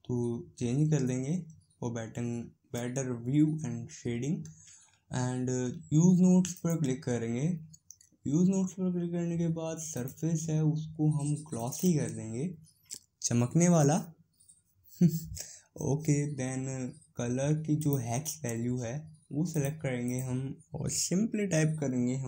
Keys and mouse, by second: 6.5-11.7 drag, 17.8-22.2 drag.